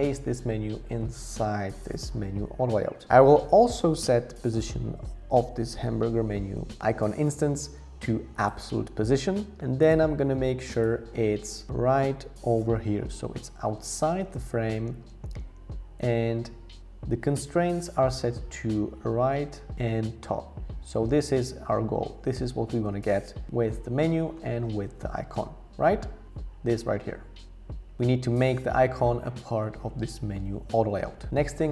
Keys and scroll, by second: 12.6 shift+Up, 13.0 shift+Up, 13.4 shift+Up, 24.8 super+z.